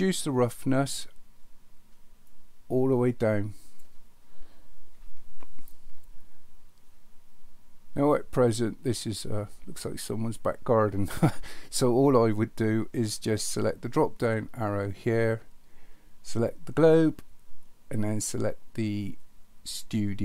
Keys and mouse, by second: 2.4-3.8 drag, 14.9-20.2 drag.